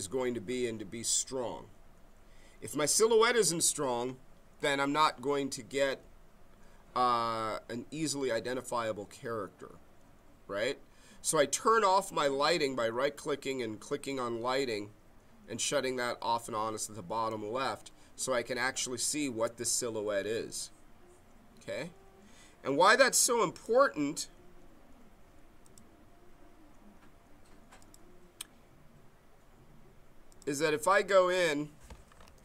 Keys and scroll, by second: 31.9-32.4 typing.